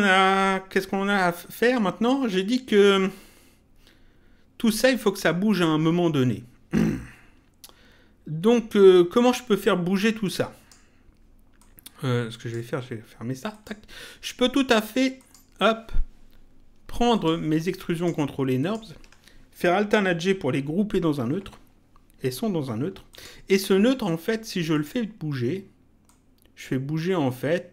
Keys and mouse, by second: 10.2 click, 11.5 click, 13.5 click, 15.1 click, 17.1 ctrl+click, 23.1 click, 24.7 click, 26.0 click.